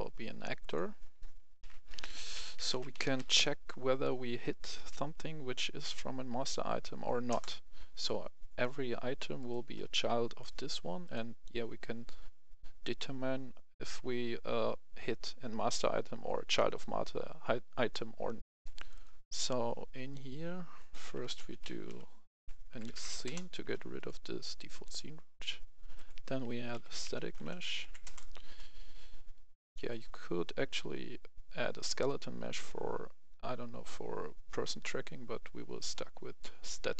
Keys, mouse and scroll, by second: 1.5-3.1 typing, 7.2 Return, 9.3 right click, 10.9 click, 18.4 F11, 18.7 click, 21.0-21.8 typing, 21.8 click, 22.6 Down, 22.8 Down, 23.2 Return, 23.9 click, 26.4-27.7 typing, 28.0 Return, 29.8 click.